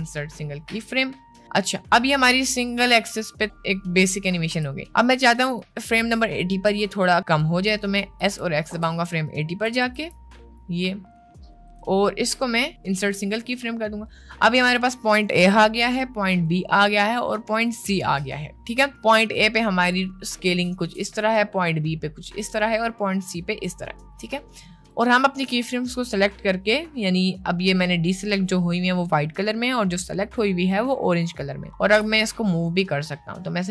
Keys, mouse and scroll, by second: 1.9 click, 2.1 space, 4.7 space, 5.6-7.6 drag, 7.9 middle click, 8.3 s, 9.7 s, 11.7-13.2 right drag, 15.1 click, 16.4 click, 17.8 click, 21.1-25.1 drag, 25.5 click, 32.3 g.